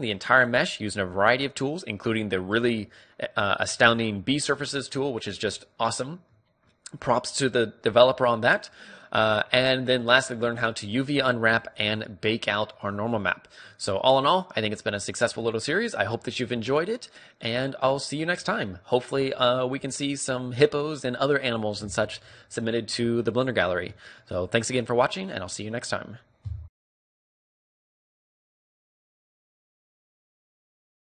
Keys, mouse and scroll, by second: 0.5-2.3 middle drag, 5.7-10.4 middle drag, 13.1-16.5 middle drag, 16.8-17.5 scroll down 1, 17.5-19.3 middle drag, 20.0-21.9 middle drag.